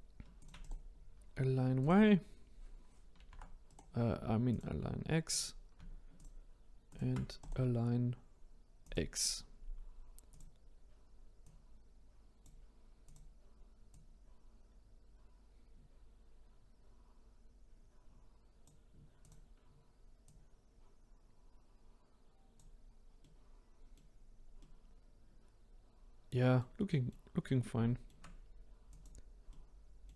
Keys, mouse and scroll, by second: 0.3 shift+click, 0.6-3.2 right drag, 3.2 ctrl+z, 3.7-5.3 right drag, 5.3 click, 6.1-6.9 shift+drag, 7.3-10.3 right drag, 10.3-11.5 drag, 13.0 click, 13.9 click, 19.2 click, 20.2 click, 23.2-28.8 middle drag, 28.8 click, 29.5-30.1 middle drag.